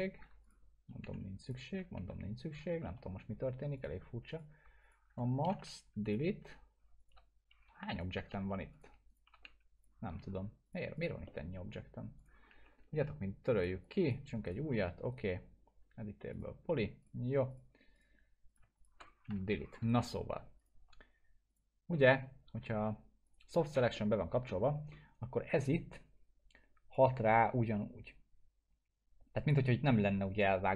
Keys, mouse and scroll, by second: 0.4 click, 1.0 Delete, 1.4 click, 1.9 Delete, 2.8 alt+middle click, 3.7 click, 4.8 shift+click, 5.6 Delete, 6.0 click, 7.0 shift+click, 7.9 shift+click, 8.3 Delete, 8.7 click, 9.1 shift+click, 9.4 Delete, 9.8 click, 11.3 middle click, 12.2 click, 12.4 scroll down 1, 12.6 Delete, 13.6 click, 14.4 right click, 14.7 scroll up 1, 15.1 right click, 16.3 click, 18.8 shift+click, 19.3 Delete, 20.6 click, 23.9-24.5 alt+middle click, 24.7 scroll up 1, 26.9-29.7 drag, 30.4-30.7 scroll down 2.